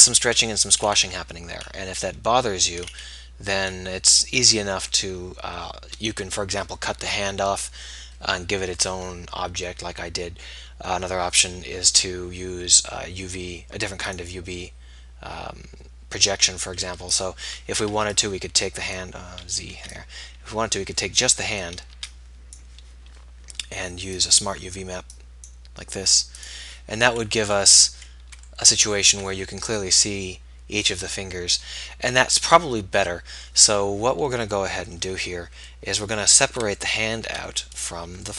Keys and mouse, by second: 16.1-17.1 drag, 17.3-19.1 drag, 17.7 a, 18.1 b, 19.5 z, 19.9 b, 22.2 b, 24.2-26.2 drag, 33.5 middle click, 34.2 KP_1.